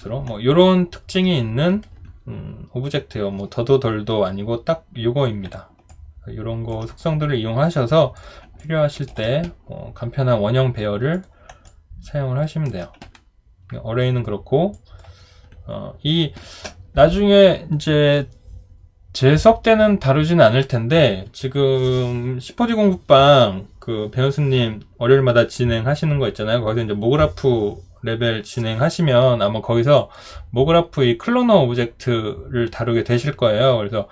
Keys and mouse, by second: 0.6 alt+click, 5.9 alt+click, 8.6 alt+click, 11.6 alt+click.